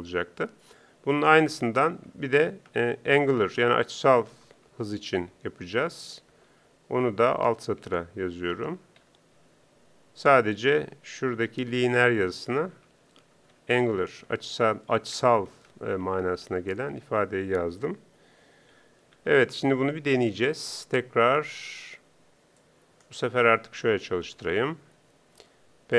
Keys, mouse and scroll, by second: 22.7 Up, 24.2 ctrl+Up.